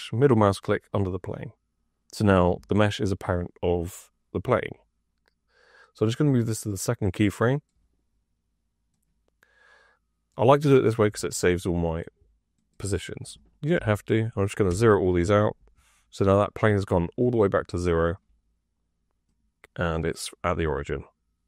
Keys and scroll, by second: 13.7 KP_0, 14.6 Return.